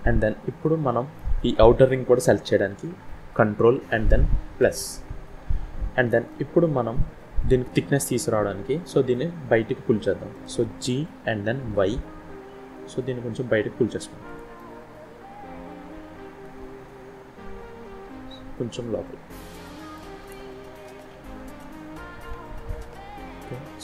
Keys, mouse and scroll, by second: 0.5 middle click, 4.5 ctrl+KP_Add, 5.6 scroll down 1, 6.2 middle click, 9.0 scroll up 1, 9.9 shift+middle click, 10.8 g, 14.5 middle click, 17.9 g, 20.1 middle click, 21.2 z, 22.2 middle click.